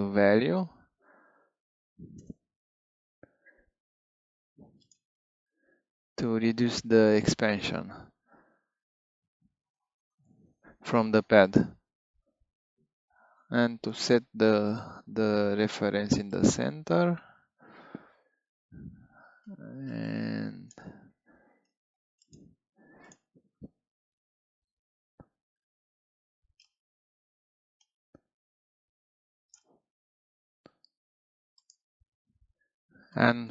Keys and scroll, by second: 0.6 m, 2.1 Return, 23.9 3, 30.2 2.